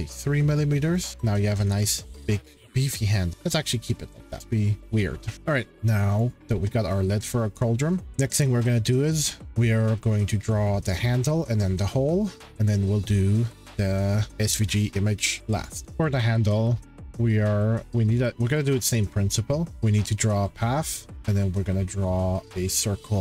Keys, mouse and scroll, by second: 1.0 click, 1.4-2.7 scroll, 3.3 shift+middle click, 3.8-4.4 scroll, 4.8 shift+middle click, 4.8 scroll, 5.7 shift+scroll, 6.2 click, 7.1 scroll, 8.0 scroll, 15.8 click, 15.8 scroll, 17.6 scroll, 19.3 middle click.